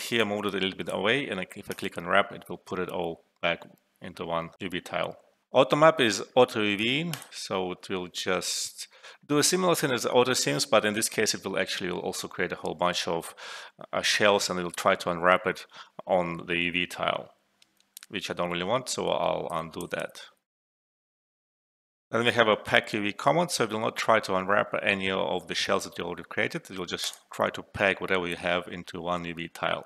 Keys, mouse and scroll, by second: 0.2-1.1 drag, 7.1 click, 18.6 ctrl+Num_Lock, 19.0 ctrl+z, 27.0 click.